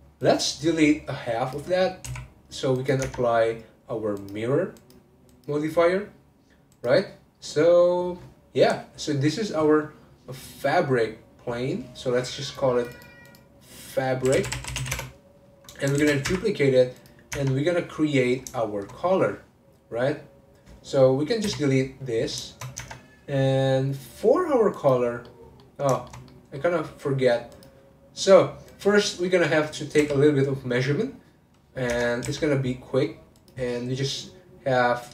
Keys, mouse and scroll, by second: 0.2 click, 1.8 scroll up 1, 2.1 x, 3.0 Tab, 4.1 click, 4.7 click, 6.8 click, 7.3-9.8 scroll down 1, 11.3 click, 12.5 click, 12.9 click, 13.2-16.0 drag, 16.0 shift+d, 17.0 click, 18.6 shift+middle click, 19.1 click, 21.5 x, 22.5 shift+middle click, 22.8 Tab, 24.7 click, 25.2-27.5 middle drag, 27.5 click, 27.9-28.7 scroll up 1, 28.7 click, 29.3 middle click, 29.6-30.0 scroll up 1, 30.0 n, 31.9 Tab, 32.2 a, 33.3 click.